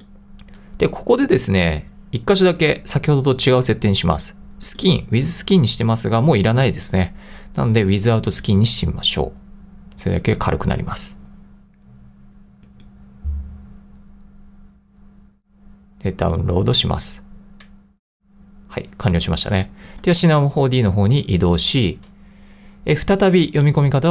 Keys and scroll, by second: 20.0 super+Tab.